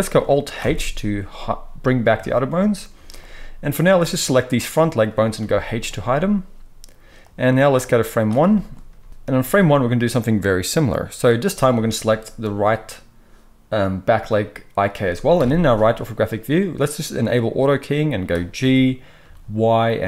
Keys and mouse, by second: 0.6 alt+h, 2.9 z, 3.9-12.3 drag, 5.4 h, 9.0 z, 12.3-20.0 middle drag, 15.3 KP_3, 18.5 g.